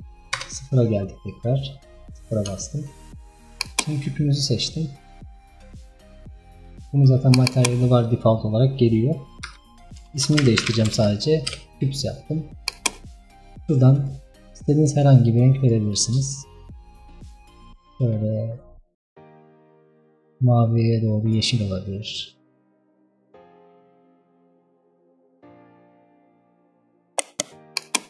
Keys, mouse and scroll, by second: 0.5 KP_0, 1.5-2.7 scroll up 11, 2.7-3.2 shift+middle drag, 3.2 shift+scroll up 1, 3.7 click, 4.4-4.9 scroll down 6, 7.3-12.1 drag, 12.7 click, 23.7-25.7 drag, 25.7-26.2 scroll down 2, 26.2-26.9 scroll up 1.